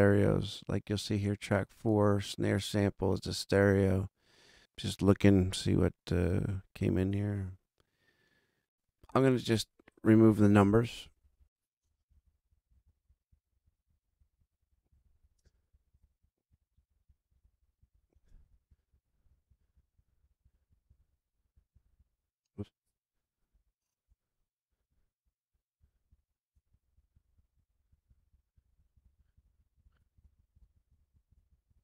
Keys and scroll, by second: 10.5 Left, 10.9 Delete, 12.0 super+Left, 12.1 Delete, 12.6 super+Left, 12.8 Delete, 13.2 super+Left, 13.3 Delete, 13.6 super+Down, 13.8 super+Left, 13.9 Delete, 14.1 super+Down, 14.3 super+Left, 14.4 Delete, 14.8 super+Left, 14.9 Delete, 15.2 super+Down, 15.3 super+Left, 15.4 Delete, 15.7 super+Down, 15.8 super+Left, 15.9 Delete, 16.5 super+Down, 16.7 super+Left, 16.8 Delete, 17.0 super+Down, 17.2 super+Left, 17.3 Delete, 17.7 super+Left, 17.8 Delete, 18.1 super+Down, 18.3 super+Left, 18.4 Delete, 18.6 super+Down, 18.8 super+Left, 18.9 Delete, 19.2 super+Down, 19.4 super+Left, 19.5 Delete, 19.7 super+Down, 19.8 super+Left, 20.0 Delete, 20.2 super+Down, 20.3 super+Left, 20.4 Delete, 20.7 super+Down, 20.8 super+Left, 20.9 super+Delete, 21.5 super+Delete, 21.6 super+Left, 21.9 super+Delete, 22.8 Escape, 24.7 super+Down, 25.7 super+Left, 25.8 Delete, 26.1 super+Down, 26.6 super+Left, 26.7 Delete, 26.9 super+Down, 27.0 super+Left, 27.1 Delete, 27.3 super+Down, 27.5 super+Left, 27.6 Delete, 27.9 super+Down, 28.0 super+Left, 28.1 Delete, 28.5 super+Left, 28.5 Delete, 28.7 super+Down, 28.9 super+Left, 28.9 Delete, 29.1 super+Down, 29.3 super+Left, 29.3 Delete, 29.5 super+Down, 29.7 super+Left, 29.7 Delete, 30.1 super+Left, 30.1 Delete, 30.4 super+Left, 30.5 Delete, 30.8 super+Left, 30.9 Delete, 31.2 super+Left, 31.3 Delete, 31.5 super+Down, 31.6 super+Left, 31.7 Delete.